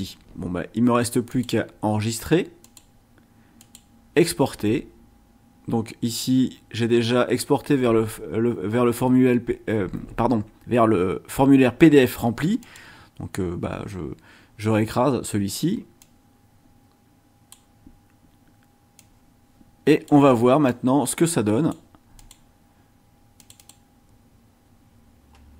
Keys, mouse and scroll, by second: 1.3 click, 2.6 click, 3.6 click, 12.6 click, 16.0-17.7 drag, 19.0-20.2 drag, 20.7-21.9 drag, 22.2 click, 23.4 click.